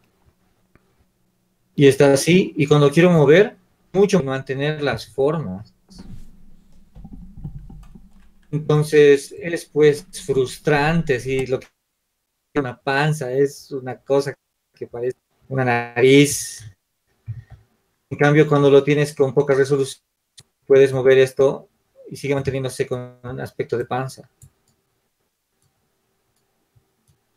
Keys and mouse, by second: 4.3 z, 5.9 shift+z, 8.6-12.4 drag, 12.4-17.9 middle drag, 17.9 ctrl+z, 18.4 ctrl+z, 20.2-21.7 middle drag, 23.8-27.3 middle drag.